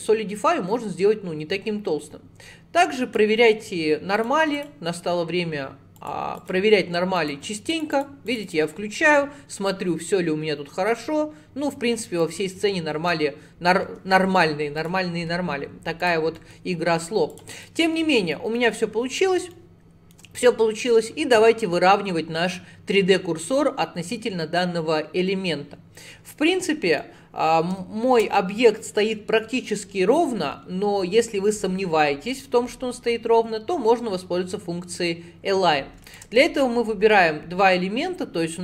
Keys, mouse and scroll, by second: 4.2 click, 4.6-6.1 drag, 6.4-8.9 drag, 8.9-10.9 scroll down 9, 10.9-12.6 middle drag, 12.6 scroll up 5, 13.0 Tab, 13.9 Tab, 14.8-16.4 drag, 16.4 middle click, 16.8 scroll up 4, 17.4 click, 17.7 middle click, 17.9 scroll down 1, 18.1-18.4 scroll up 4, 18.4 middle click, 18.8-19.6 scroll up 6, 19.6-22.6 shift+middle drag, 27.0-30.1 middle drag, 36.1 shift+click, 37.1-38.6 middle drag.